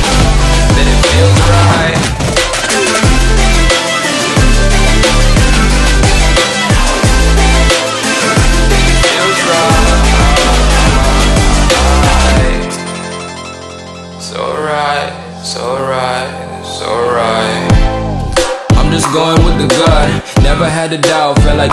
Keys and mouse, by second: 5.2 right click, 6.1 click, 6.7 ctrl+=, 7.1-7.6 space, 8.2 click, 10.2-11.4 drag, 11.8 Right, 12.9 click.